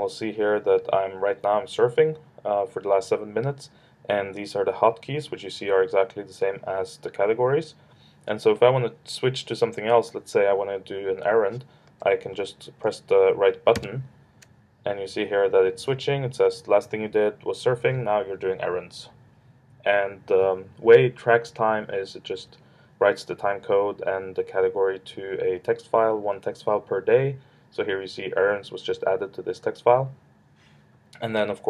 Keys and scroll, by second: 13.8 ctrl+alt+super+8.